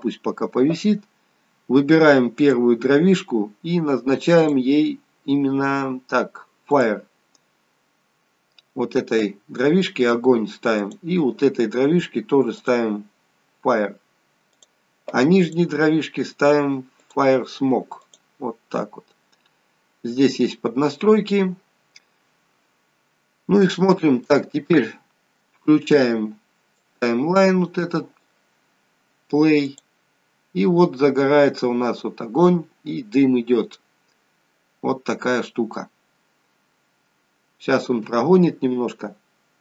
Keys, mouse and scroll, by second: 2.4 click, 4.5 click, 7.7-9.5 scroll up 9, 9.5-10.3 scroll up 3, 10.3-10.8 scroll down 1, 10.8 click, 12.6 click, 17.0 click, 21.2-23.6 scroll down 10, 23.6 scroll down 2, 23.7 shift+middle click, 27.0 click, 29.7 click, 33.9-34.5 scroll up 6, 34.8-37.3 scroll down 3.